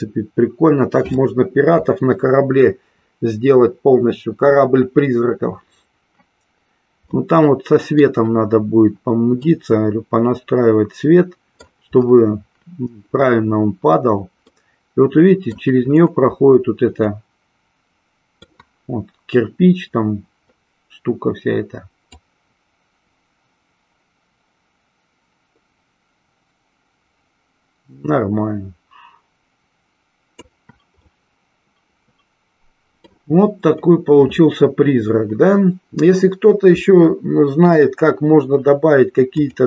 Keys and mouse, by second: 7.4-8.5 middle drag, 9.5-11.8 middle drag, 14.8-15.8 middle drag, 17.5-18.5 middle drag, 22.3-30.7 drag, 31.3-33.5 middle drag.